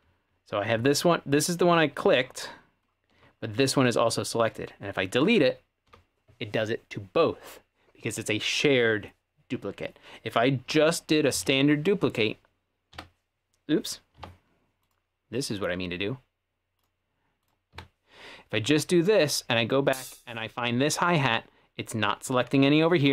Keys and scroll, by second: 5.9 Delete, 10.7 super+z, 11.3 super+z, 12.9 d, 14.2 super+z, 17.7 d, 19.2 d.